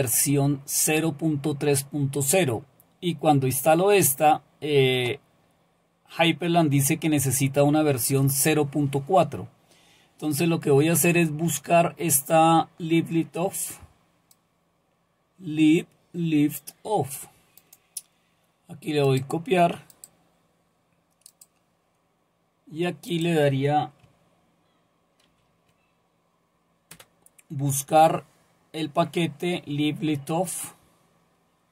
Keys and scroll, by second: 25.2 ctrl+v, 26.9 Return.